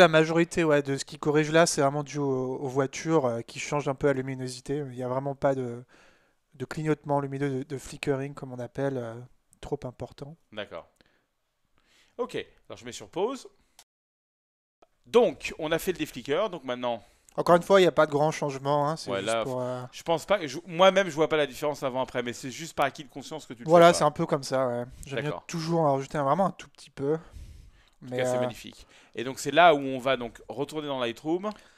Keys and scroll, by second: 13.9 ctrl+p, 30.5 super+Tab.